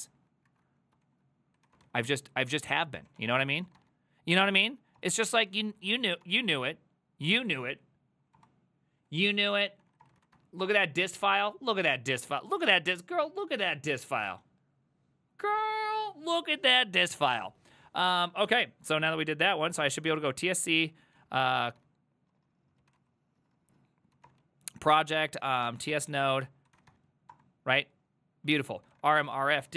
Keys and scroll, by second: 0.0-11.1 typing, 0.7 Left, 1.1 ctrl+w, 4.4 Tab, 19.6-27.2 typing, 20.5 Up, 21.2 ctrl+w, 27.3 Return, 28.6-29.7 typing.